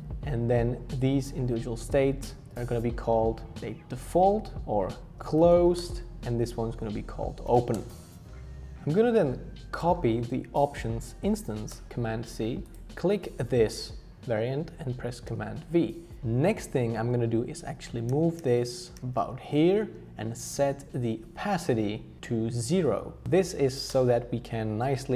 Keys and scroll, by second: 4.9-8.0 typing, 11.7 super+c, 11.9 super+c, 15.3 super+v, 18.1 shift+Down, 18.4 shift+Down, 18.9 shift+Down, 19.0 shift+Down, 23.3 0, 23.9 Return.